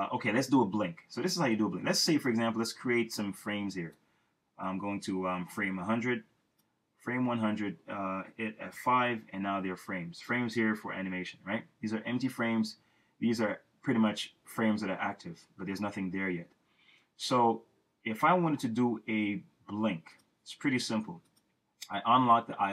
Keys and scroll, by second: 8.7 F5.